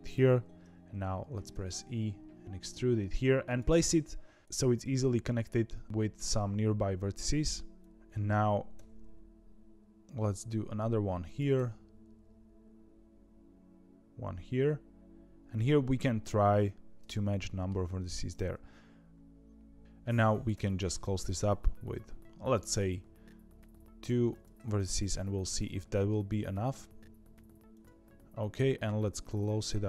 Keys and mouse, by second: 1.4 e, 4.4 g, 8.7 e, 11.5 e, 17.3 shift+middle click, 20.5 e, 24.5 e, 28.0 g.